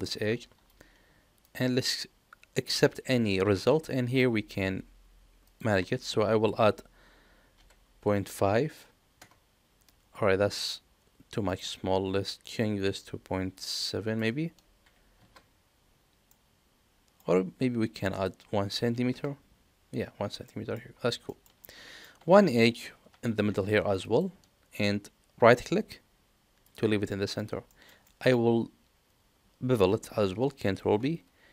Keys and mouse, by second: 0.0 ctrl+b, 5.4-10.4 drag, 11.4-15.9 drag, 16.2 middle click, 18.0-19.8 drag, 20.4 middle click, 21.2 shift+middle click, 21.6 middle click, 23.1 ctrl+r, 27.0 middle click, 27.6 shift+middle click, 28.0 middle click, 30.7 ctrl+b.